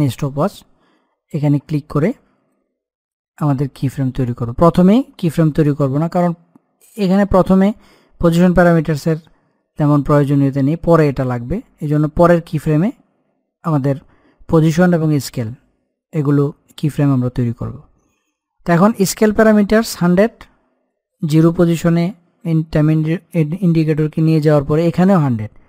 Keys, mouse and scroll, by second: 21.0-23.7 drag.